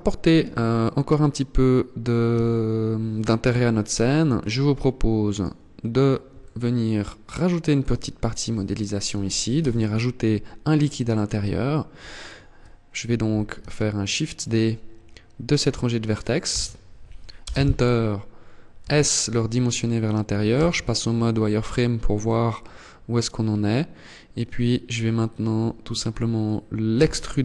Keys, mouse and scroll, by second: 1.5 KP_1, 3.4 click, 4.3 scroll down 5, 5.7 shift+middle click, 7.2 scroll up 2, 7.9 shift+middle click, 8.8 Tab, 11.4 alt+right click, 15.7 shift+d, 18.0 s, 19.4 click, 19.7 z, 20.2-20.7 scroll up 1, 20.7 scroll down 2, 21.0 scroll down 2, 21.2-21.6 scroll up 3, 26.1 e.